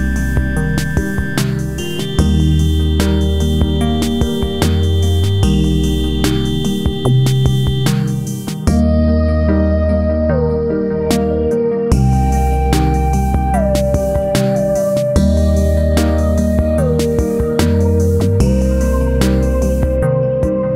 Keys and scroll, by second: 5.3 ctrl+a, 6.2 Right, 6.4 Up, 6.7 Right.